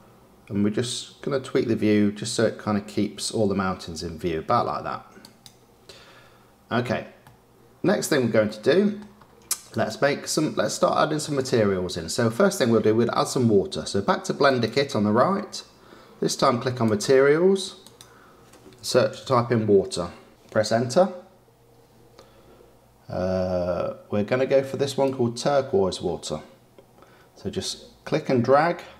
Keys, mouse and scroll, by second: 7.2-7.8 middle drag, 7.8-8.4 scroll down 4, 8.4-9.0 middle drag, 9.0-9.6 scroll down 2, 9.6 click, 10.6-13.6 shift+middle drag, 14.4 click, 16.8 click, 17.8-20.3 drag.